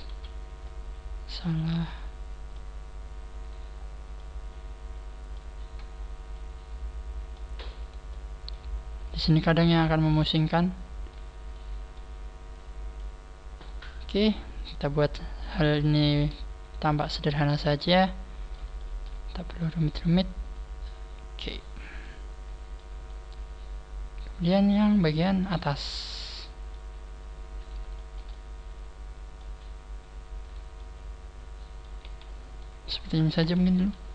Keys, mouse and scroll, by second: 0.6 ctrl+z, 0.6 middle click, 2.8-3.3 scroll up 4, 3.3 right click, 3.8 scroll up 2, 4.1 middle click, 5.4 right click, 5.8 scroll down 7, 6.2 middle click, 7.7 right click, 8.0 middle click, 9.0 click, 10.2 middle click, 11.6 middle click, 12.4 middle click, 12.4 click, 13.2 scroll down 2, 13.6 middle click, 14.3 scroll down 1, 14.6 middle click, 15.3-15.7 scroll up 5, 15.8 shift+middle click, 16.5 right click, 16.7 scroll up 1, 16.8 shift+middle click, 17.7 click, 18.7 shift+middle click, 19.4 right click, 20.0 shift+right click, 20.4 click, 21.6 scroll down 4, 22.0 middle click, 23.0 shift+right click, 23.0 click, 23.0 middle click, 25.5 shift+middle click, 26.9 scroll up 3, 27.5 right click, 27.5 scroll up 1, 27.8 shift+middle click, 28.2 shift+middle click, 30.3 right click, 30.6 middle click, 31.9 z, 32.1-32.5 scroll down 7, 32.5 middle click, 33.0 scroll down 1, 33.3 KP_3, 33.7 KP_1.